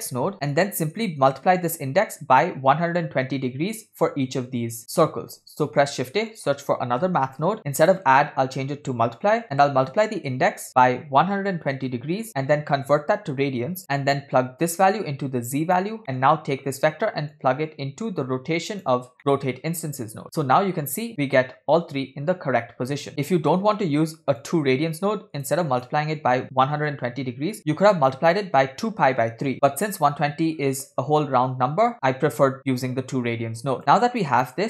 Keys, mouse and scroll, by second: 0.3 middle click, 0.3 scroll down 2, 0.6 click, 5.4 shift+a, 7.6 click, 7.8-9.4 drag, 9.6-10.6 drag, 11.9 click, 12.3 middle click, 13.0-13.8 drag, 14.7-15.9 drag, 16.0 middle click, 17.4-19.0 drag, 20.4-20.7 middle drag, 23.1-23.8 middle drag, 24.5-25.6 drag, 25.6 middle click, 25.9-27.2 scroll up 1, 27.2-27.5 scroll up 2, 27.6-28.2 scroll down 2, 32.7 click, 32.9 click, 33.8 middle click, 33.8 scroll down 4, 34.4-34.6 scroll up 7.